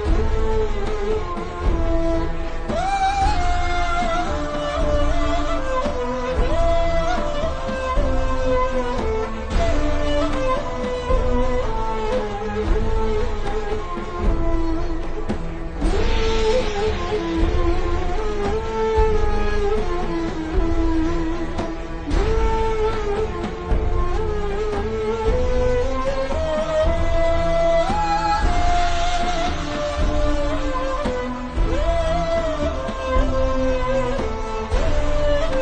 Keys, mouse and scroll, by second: 4.1 alt+shift+scroll down 2, 4.4-4.9 ctrl+scroll up 2, 4.9-5.4 scroll down 2, 5.5-6.6 scroll up 4, 6.6 click, 9.7-11.2 alt+shift+scroll down 3, 12.7 scroll up 1, 13.2 shift+scroll down 1, 14.1 click, 14.5 alt+shift+scroll down 1, 15.7 alt+shift+scroll up 1, 16.2 click, 19.1 ctrl+scroll up 1, 19.8 scroll up 1, 20.0 click, 23.3-23.7 scroll down 1, 29.5-30.1 scroll down 1, 30.1 click, 32.8 click, 34.3 click.